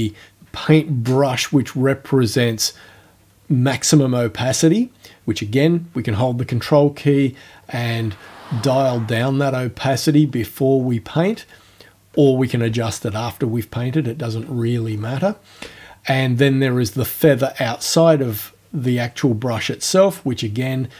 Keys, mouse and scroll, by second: 7.2-8.0 ctrl+scroll up 2, 8.2-9.0 ctrl+scroll up 1, 9.2-9.7 ctrl+scroll up 1, 9.7-10.5 ctrl+scroll down 1, 10.8-11.4 ctrl+scroll down 2, 14.9-15.4 ctrl+scroll down 1.